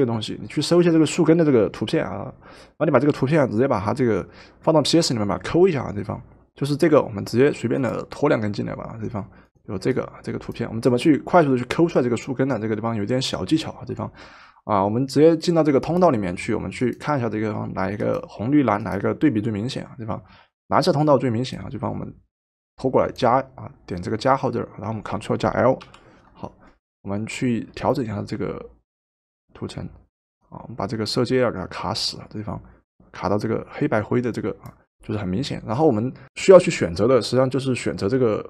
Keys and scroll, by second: 2.1 typing, 25.8 ctrl+l.